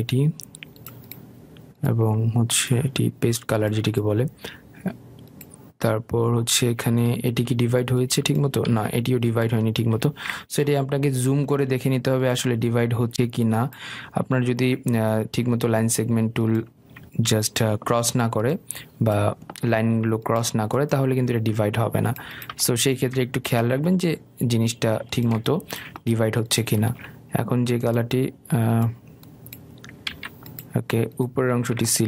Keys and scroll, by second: 0.9 i, 9.8 ctrl+z, 18.3 Escape.